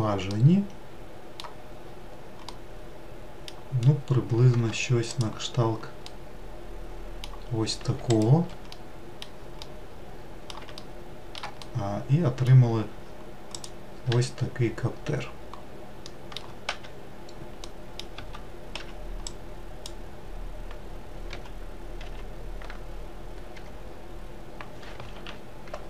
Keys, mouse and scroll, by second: 0.2-1.3 middle drag, 1.3-1.6 scroll down 2, 2.3-4.3 middle drag, 4.3 Tab, 4.9 click, 5.9-7.2 middle drag, 7.2 scroll down 1, 7.8 shift+right click, 8.5-13.4 middle drag, 13.4 click, 13.8 1, 15.8 middle click, 16.4 1, 17.4 middle click, 17.9 Tab, 18.5 1, 19.6 click, 21.0 g.